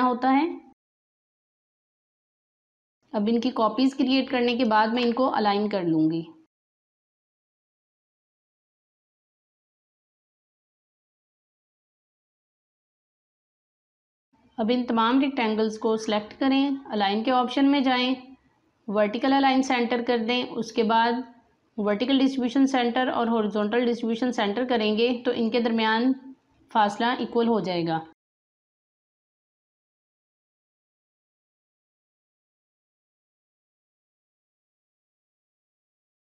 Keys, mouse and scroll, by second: 0.7 ctrl+z, 1.0 alt+scroll up 2, 1.3 click, 1.8 alt+scroll down 1, 1.8 space, 1.9 click, 2.4-2.7 scroll down 1, 2.8-6.5 alt+drag, 6.5 alt+click, 6.8 click, 8.3-11.0 alt+drag, 11.0 space, 11.1 click, 11.8 alt+click, 12.4 space, 12.7 click, 13.0 alt+click, 14.0 space, 21.6 typing, 21.8 click, 28.1 alt+scroll down 2, 28.2 space, 28.3 click, 28.4 space, 29.1-30.6 drag, 34.3 click, 35.8 space, 36.0 click, 36.0 space.